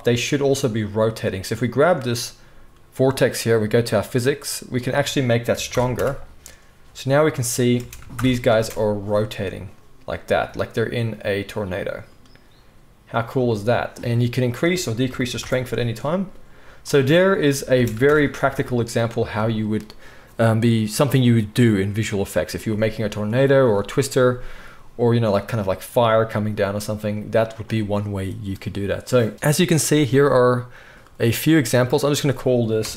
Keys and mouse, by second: 1.7-3.9 middle drag, 3.9 click, 4.0 middle click, 4.7-31.1 drag, 7.7 space, 8.1 shift+Left, 8.5 space, 17.7 space, 18.0 shift+Left, 18.4 space, 31.1-31.8 middle drag, 31.8-32.9 drag.